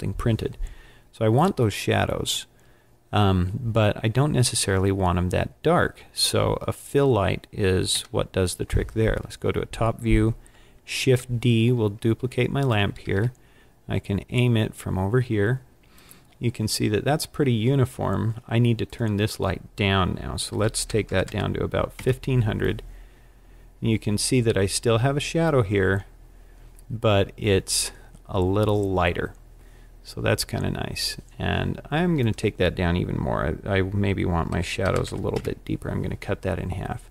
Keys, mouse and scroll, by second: 8.0 KP_7, 11.0 shift+d, 13.0 click, 13.0 r, 16.0 click, 18.9 click, 21.3 KP_0, 32.2 click.